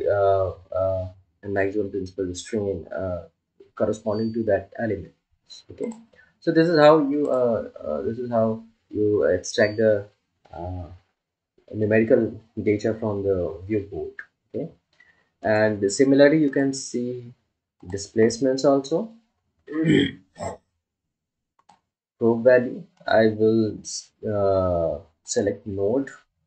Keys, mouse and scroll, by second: 7.9 click, 23.3 click.